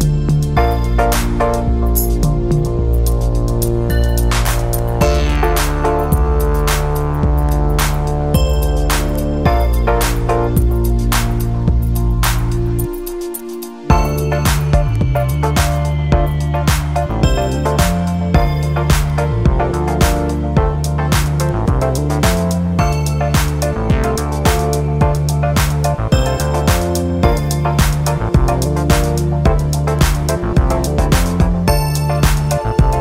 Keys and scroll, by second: 27.6 super+u.